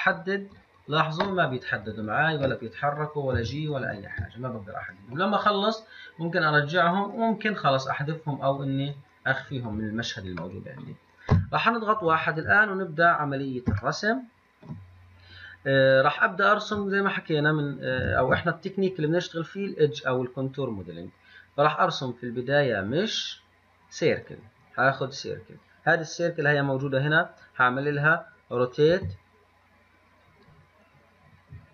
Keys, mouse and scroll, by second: 0.0 click, 0.4 click, 0.8 click, 1.2 click, 1.5 drag, 1.9-2.4 drag, 3.1 click, 3.6 g, 4.2 click, 6.6 click, 6.9 click, 7.3 click, 7.7 click, 8.8 click, 9.1 click, 10.9-11.5 middle drag, 11.5 KP_1, 12.8 scroll up 3, 14.1-17.1 shift+middle drag, 18.4 shift+a, 29.2 r.